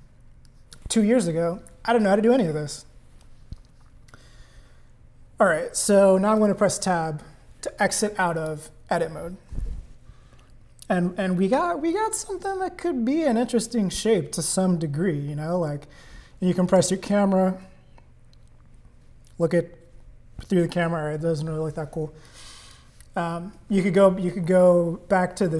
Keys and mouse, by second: 0.4 click, 6.4 Tab, 8.4 click, 16.7 click, 22.2 click.